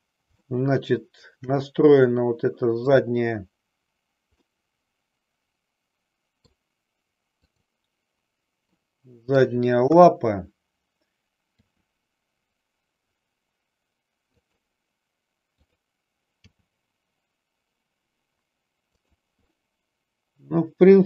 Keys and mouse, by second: 0.4 shift+middle click, 4.4-6.6 middle drag, 7.3 click, 8.8 middle click, 9.9 KP_3, 11.7 r, 14.5 click, 15.6 click, 16.6 g, 19.1 click, 19.6-21.0 middle drag.